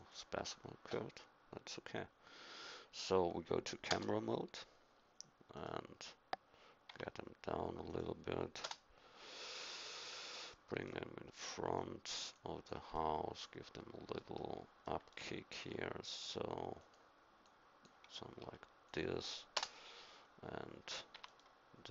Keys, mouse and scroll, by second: 3.9 KP_0, 5.5-7.4 right drag, 6.9 g, 8.6 KP_0, 15.5 r, 17.4-19.5 drag, 18.4 r, 19.5 KP_0, 21.1 g.